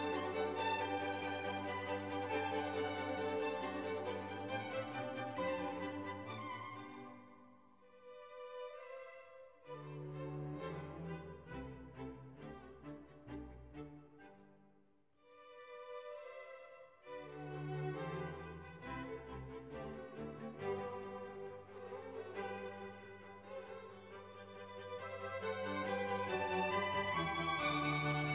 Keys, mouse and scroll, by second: 0.0-0.2 typing, 0.5 ctrl+a, 2.4 click, 3.1 5, 3.5 Return, 5.9 click, 6.9-8.8 drag, 11.6 click, 12.6 click, 13.1 2, 14.6-16.2 typing, 16.3 ctrl+a, 17.9 click, 18.6 5, 19.0 0, 19.2 Return, 21.2 click, 22.4-24.8 drag, 27.0 click, 28.2 click.